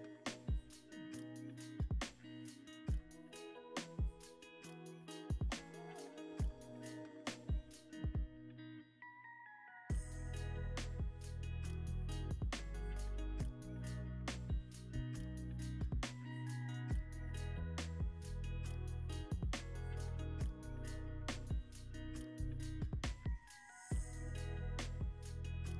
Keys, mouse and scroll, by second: 2.8 middle click, 3.8 Tab, 4.2 middle click, 5.6 Tab, 13.3 middle click, 18.8 Tab, 19.2 middle click, 19.2 scroll up 1, 20.4 Tab, 21.0 ctrl+r, 23.7 scroll down 1, 23.9 ctrl+r.